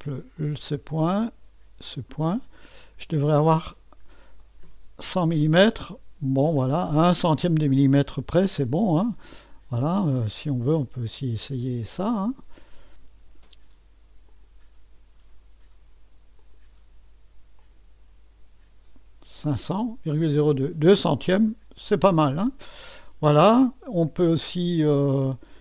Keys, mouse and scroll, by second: 0.3-2.2 drag, 4.4-5.6 right drag, 5.6 middle click, 6.6-7.5 scroll up 1, 8.7 click, 9.3 middle click, 9.3-10.2 scroll down 1, 10.2-11.3 middle drag, 12.6 click, 14.3 click, 16.4 click, 17.6 click, 21.8 click, 22.5 middle click, 23.5-25.1 scroll up 1.